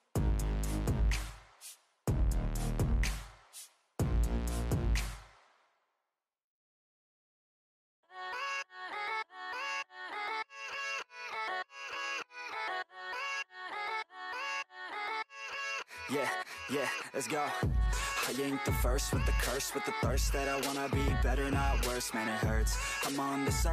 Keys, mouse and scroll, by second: 0.9 click, 1.2 scroll down 6, 1.5 drag, 1.7-2.5 middle drag, 2.5 scroll up 2, 2.7 middle click, 3.3 scroll up 1, 3.4 middle click, 4.1 ctrl+r, 5.4 click, 5.7 shift+click, 6.1 f, 6.5 ctrl+z, 6.6 middle click, 6.7 scroll up 3, 7.0 j, 7.4-8.3 middle drag, 8.3 click, 8.9 shift+click, 9.3 j, 9.8 click, 10.2 middle drag, 10.5-10.9 scroll down 2, 10.9 shift+middle click, 11.4 scroll down 7, 11.6 middle click, 11.9 KP_3, 12.5 shift+middle click, 12.9 click, 13.1-13.5 scroll up 1, 13.5 click, 13.7 scroll up 1, 14.3 shift+middle click, 14.5-18.0 typing, 17.3 scroll up 1, 19.6 s, 20.1 click, 20.4 scroll up 1, 20.7 c, 22.9-23.7 typing.